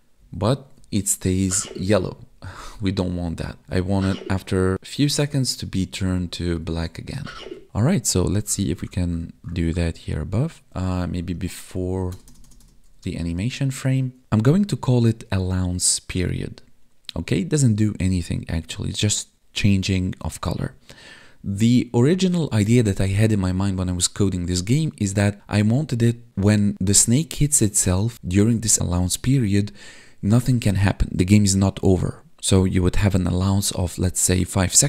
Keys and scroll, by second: 0.2 Up, 0.7 Right, 1.5 Down, 2.2 Left, 2.5 Up, 3.2 Left, 3.6 Right, 4.2 Down, 4.9 Left, 5.1 Up, 5.8 Right, 6.2 Down, 6.6 Left, 6.8 Down, 7.3 Right, 11.1 Up, 13.1 Up, 13.7 Tab, 14.2 ctrl+z.